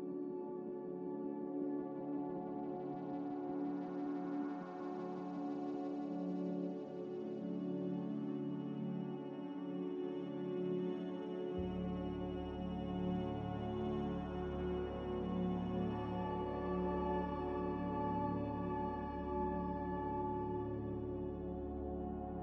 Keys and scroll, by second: 0.1 s, 3.5-5.8 typing, 8.3 a, 21.3 n.